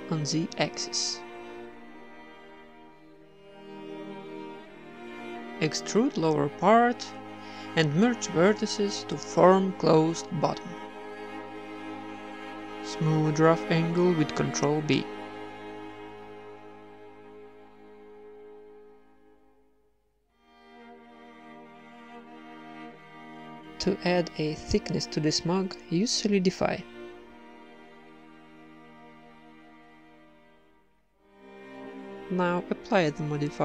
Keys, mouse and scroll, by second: 0.1-2.5 typing, 3.8-4.8 middle drag, 4.6 a, 4.8 b, 5.0 middle click, 5.3 e, 6.5 alt+m, 7.2 t, 7.8 alt+m, 9.0 g, 9.8 click, 10.6-13.0 middle drag, 11.8 z, 12.3 a, 12.4 a, 12.8 ctrl+n, 13.0 a, 13.3-14.3 right drag, 13.8 ctrl+b, 15.9 ctrl+Tab, 16.2 a, 16.3 c, 16.8 click, 16.8 w, 17.5 Tab, 17.8 Tab, 17.9 a, 18.2-19.2 right drag, 18.4 g, 18.9 Tab, 19.2 z, 19.6 ctrl+1, 20.4 Tab, 20.8 KP_1, 21.3 ctrl+r, 22.8 ctrl+r, 24.2 Tab, 25.1-26.7 drag, 27.0 click, 27.2 right click, 28.0 middle click, 28.0-29.0 drag, 29.8 middle click, 30.0 Tab, 30.7 ctrl+r, 31.4 Tab, 32.5 click, 32.7 Tab, 32.9 right click, 33.4 z.